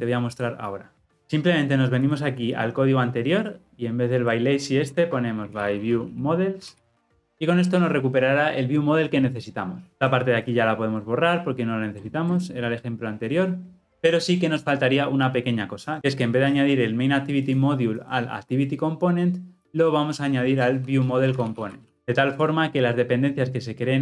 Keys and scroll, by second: 7.2 ctrl+alt+o, 21.9 Tab.